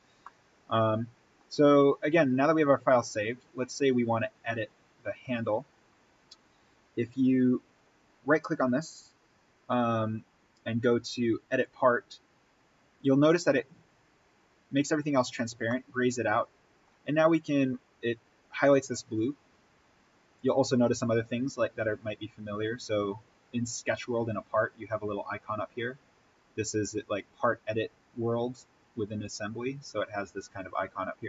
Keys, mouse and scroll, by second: 0.1-1.6 middle drag, 1.6-2.9 scroll down 1, 2.9 click, 5.4 right click, 11.4 click, 15.6-19.1 middle drag, 20.3 click.